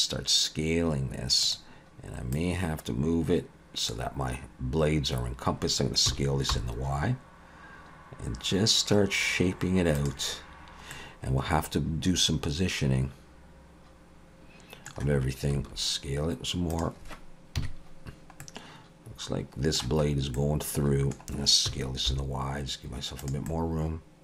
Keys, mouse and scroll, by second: 2.3 click, 6.1 s, 10.9 middle click, 15.5 s, 17.6 KP_3, 18.4 middle click, 20.1-20.6 scroll up 2, 20.4 middle click, 21.7 s, 23.5 middle click.